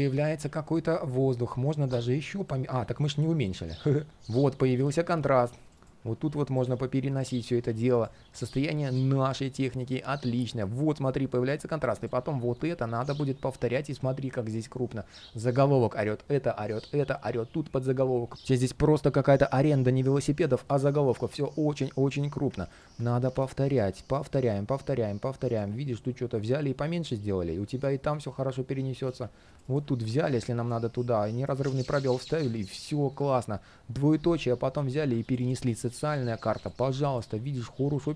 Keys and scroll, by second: 6.5 alt+space, 8.8 alt+space, 12.0 alt+super+c, 23.0 alt+super+v, 23.9 alt+super+v, 31.4 alt+space, 36.1 alt+space.